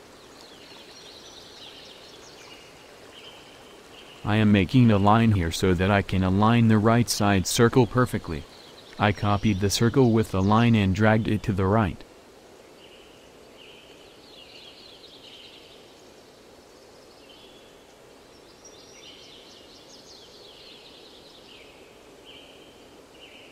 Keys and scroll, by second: 8.5 i, 13.2 ctrl+c, 14.1 ctrl+shift+v.